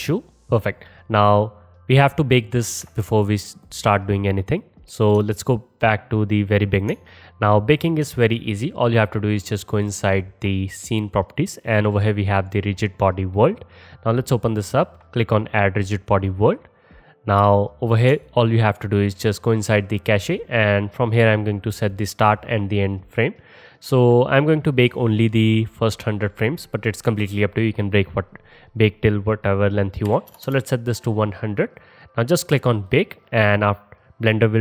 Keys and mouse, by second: 4.0 space, 4.7-9.8 drag, 9.8-13.4 middle drag, 13.4-31.8 drag, 30.5 KP_0, 31.8-32.9 middle drag, 32.9-34.6 drag.